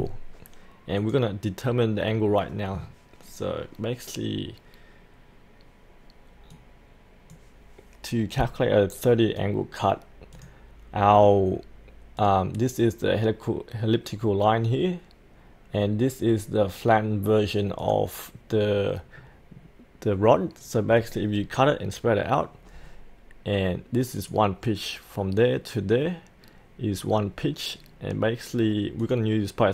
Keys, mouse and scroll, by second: 1.0 click, 3.3-29.7 drag.